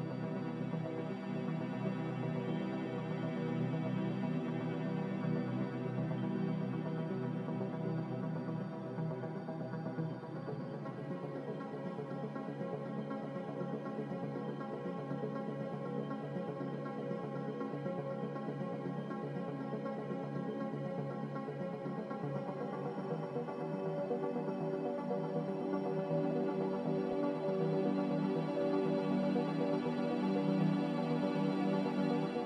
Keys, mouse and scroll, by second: 3.1 a, 8.5 x, 9.3 Escape, 9.9 z, 10.7 x, 13.0 z, 17.4 z, 21.6 c, 24.1 a, 28.9 z, 30.0 c, 31.9 a.